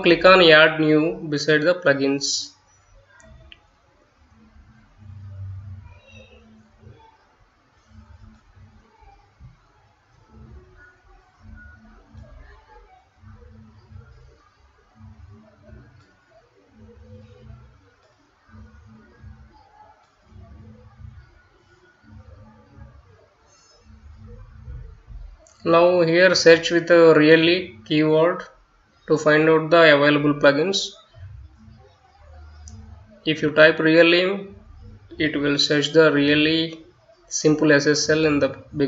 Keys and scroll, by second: 4.8-9.5 typing, 25.3-27.0 typing.